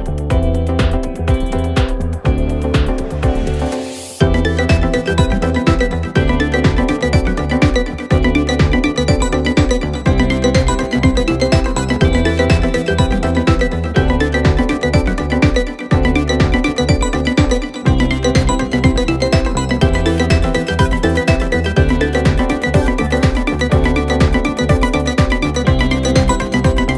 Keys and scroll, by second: 2.7 ], 4.5 4, 14.0 3, 18.9 ], 19.7 ], 21.4 4, 25.2 3, 26.8 ].